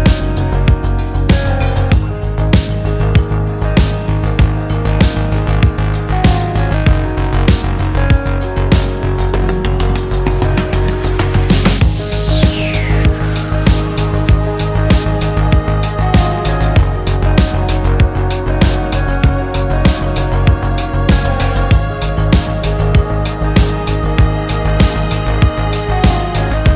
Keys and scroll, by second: 5.8 b, 8.8 space, 9.5 ctrl+d, 23.6 ctrl+g, 25.9 e.